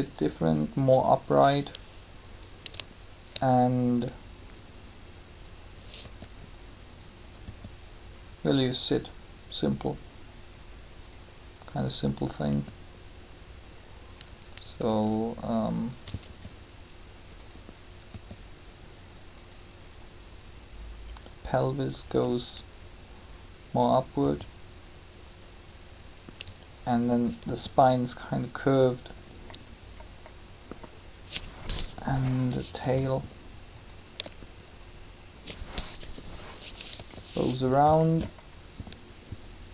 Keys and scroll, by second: 6.0 r, 12.5 r, 16.3 shift+r, 18.1 r, 24.1 r, 27.4 shift+r, 31.5 3, 35.8 7.